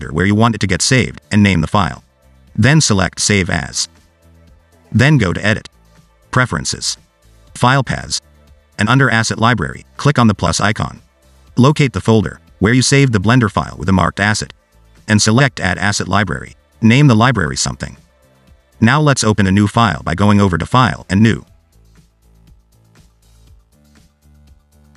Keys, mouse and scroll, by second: 5.9 click, 20.5 click.